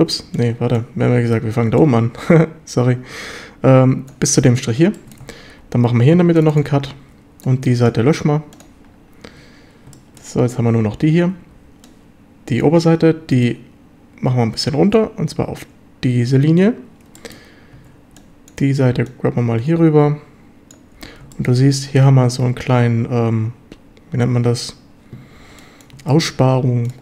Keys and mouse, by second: 0.0 a, 0.2 b, 1.8-4.1 drag, 5.0 shift+middle drag, 5.6 ctrl+r, 7.0 a, 7.3 b, 8.0 x, 9.3 a, 10.0 shift+click, 11.5 b, 13.4-14.9 drag, 17.2 shift+middle drag, 17.8 a, 18.0 b, 19.1-20.7 drag, 21.0 a, 21.3 drag, 25.4 b, 26.1 click, 26.6 b.